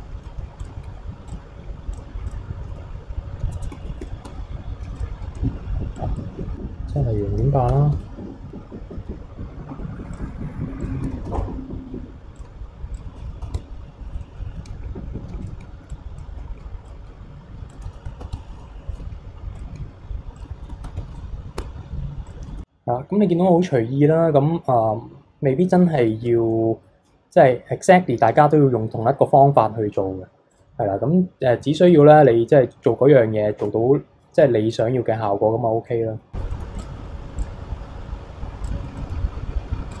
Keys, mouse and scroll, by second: 0.2 middle click, 0.6 alt+click, 1.3 click, 2.3 alt+click, 2.7 middle click, 2.9-4.1 scroll up 3, 4.1-5.0 shift+middle drag, 5.0 alt+click, 5.4-6.0 scroll down 1, 6.0-8.5 drag, 8.9-10.1 middle drag, 10.1 alt+click, 10.8-12.3 drag, 12.4 alt+click, 13.0-14.0 drag, 14.0 scroll down 2, 14.2 middle click, 14.5 scroll up 2, 15.4 alt+click, 15.9-16.9 drag, 17.7-18.9 drag, 18.9 middle click, 19.6 alt+click, 20.4-21.5 drag, 21.5 scroll down 2, 21.6 Tab, 22.3 click, 22.4 scroll down 1, 22.5 KP_3, 23.1-24.0 scroll down 3, 24.0-25.5 scroll up 2, 25.5-26.5 scroll up 1, 26.7 middle click, 27.3-29.5 scroll down 1, 29.5-30.5 scroll up 3, 30.5 click, 31.8 click, 32.5-33.6 scroll down 4, 33.6 q, 34.7 click, 35.2-35.9 scroll down 2, 35.9-36.3 middle drag, 36.3 scroll down 1, 36.5 middle drag, 36.8 click, 37.4-38.9 drag, 39.0-39.9 middle drag, 39.9-40.0 drag.